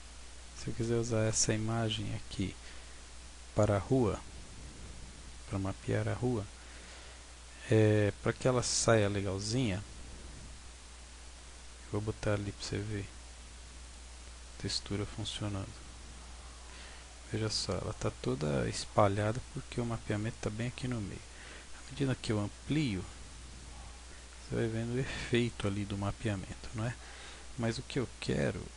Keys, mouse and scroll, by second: 0.5-0.8 scroll down 1, 1.6-2.1 scroll down 1, 2.1-2.5 scroll down 5, 5.8-6.6 scroll up 1, 6.6-6.9 scroll down 2, 6.9-7.5 scroll down 3, 12.7 click, 14.5-14.8 scroll up 4, 15.0-16.2 scroll down 2, 16.2 scroll down 1, 16.3 Tab, 17.2-17.8 scroll up 2, 18.8 scroll down 1, 19.4 Tab, 21.8 s, 23.5 click, 23.8-24.2 scroll down 4, 24.2 Tab, 26.4 Tab, 27.0 Tab, 27.5 Tab, 28.7 scroll up 1.